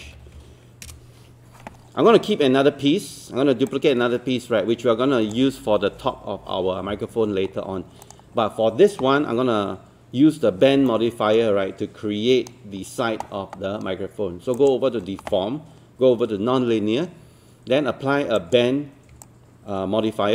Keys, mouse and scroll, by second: 0.0-0.8 typing, 0.9 Return, 1.9 scroll down 1, 2.2-3.4 scroll up 1, 3.7-5.3 shift+drag, 7.5 scroll up 1, 8.0 click, 8.5-10.8 scroll down 1, 10.9 alt+middle click, 14.6 click, 19.2 alt+click.